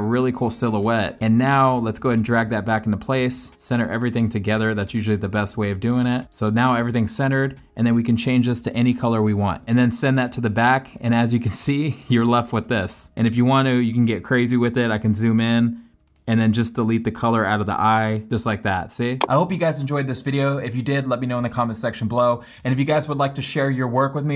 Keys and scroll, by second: 2.4 space, 3.0 space, 6.3 space, 6.8 space, 7.7 space, 9.6 super+[, 11.2 space, 12.6 super+z, 18.5 space.